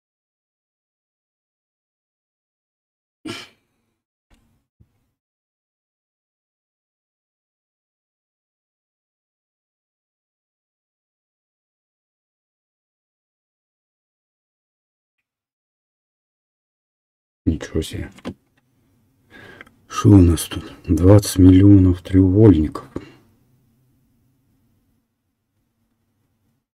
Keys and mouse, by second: 8.2-26.6 right drag.